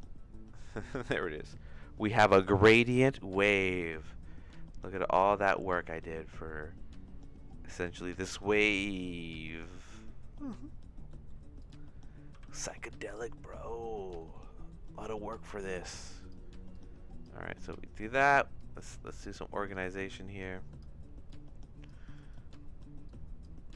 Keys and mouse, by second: 5.7-8.1 shift+middle drag, 9.6 middle click, 11.1 click, 11.6 click, 12.4 g, 14.2 middle click, 14.7 middle click, 15.3 click, 15.9 click, 16.7 click, 17.6 click, 18.6 click, 19.7-20.8 drag, 21.3 click, 22.2 shift+right click, 23.1-23.7 drag.